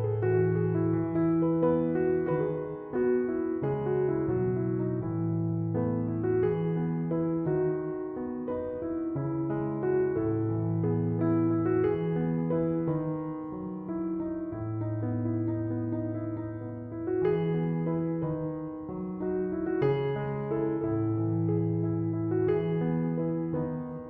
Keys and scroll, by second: 8.4 6, 8.6 Return, 12.1 f, 16.4 3, 16.6 Return.